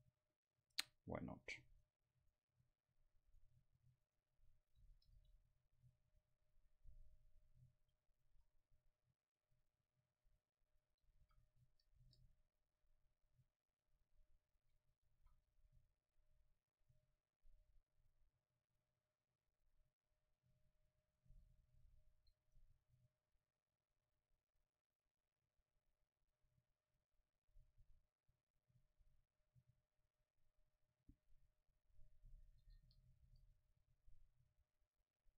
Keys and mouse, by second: 1.9-4.2 drag, 4.8-7.4 drag, 5.5 Delete, 9.6 Tab, 10.7-12.8 drag, 13.7-15.4 drag, 15.4 a, 15.7 c, 21.2-23.0 drag, 21.3 KP_0, 23.6-26.7 drag, 27.5 Tab, 30.1-33.8 drag, 34.9-35.3 drag.